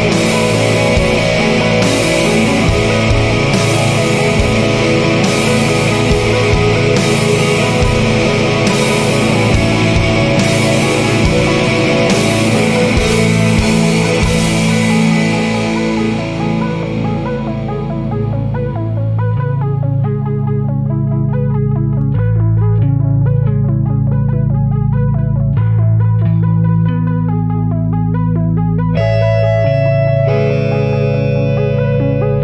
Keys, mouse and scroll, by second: 1.5 click, 3.0 scroll up 1, 4.7 click, 6.9 scroll up 2, 8.6 click, 9.9 scroll up 2, 11.6 click, 12.8 scroll up 2, 15.0 click, 16.1 scroll up 1, 17.6 click, 18.7 scroll up 2, 20.7 click, 21.8 scroll up 1, 23.5 click, 24.5-24.9 scroll up 2, 25.3-25.6 scroll down 2, 26.5 scroll up 2, 28.6 click, 29.9 scroll up 2, 31.7 click.